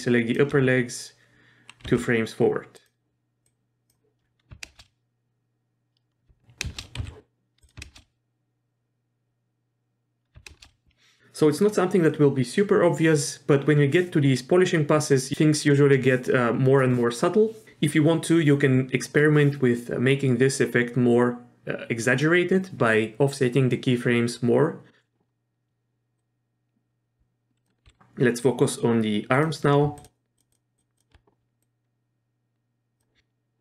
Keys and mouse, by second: 1.8 g, 3.5-3.9 drag, 4.7 shift+space, 6.7 shift+space, 7.0 z, 7.7 click, 7.8 shift+space, 10.5 shift+space, 26.2-27.6 drag, 27.8 z, 29.3 click, 30.4 shift+click, 30.8 shift+click, 31.6-33.0 drag.